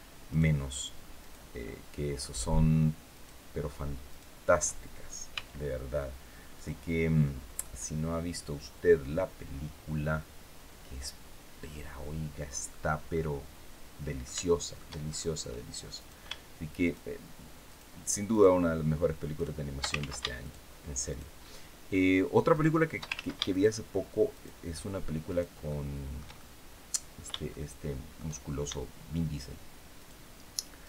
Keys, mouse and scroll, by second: 0.0 shift+right click, 0.9 shift+right click, 1.3 shift+middle click, 2.8 shift+right click, 3.8 shift+right click, 5.0 x, 6.2 click, 6.8-7.2 scroll down 2, 7.3-12.5 middle drag, 12.8-14.1 middle drag, 14.2 shift+middle click, 14.7 shift+scroll up 2, 15.6 right click, 16.5 shift+right click, 17.3 shift+right click, 18.0 shift+right click, 19.0 shift+right click, 19.6 ctrl+shift+z, 20.1 ctrl+shift+right click, 20.8 shift+right click, 21.1 shift+middle click, 22.2 shift+right click, 22.8 ctrl+shift+z, 23.2 ctrl+shift+right click, 24.0 shift+right click, 25.0 shift+right click, 25.3-28.0 shift+middle drag, 29.6 shift+right click, 30.5 shift+right click.